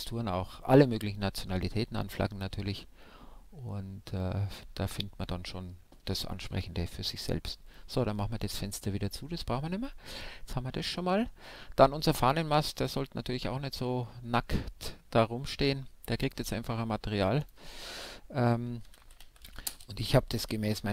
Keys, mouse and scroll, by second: 4.5-6.2 drag, 5.7-10.4 middle drag, 9.6-11.3 right drag, 13.0-15.9 drag.